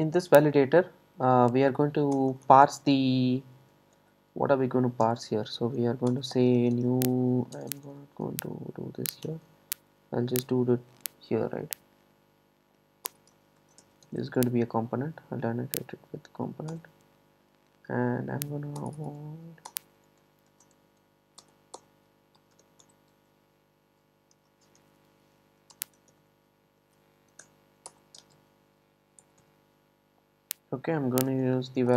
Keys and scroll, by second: 9.7 Return, 16.8 Return, 21.5 Return, 27.9 Return.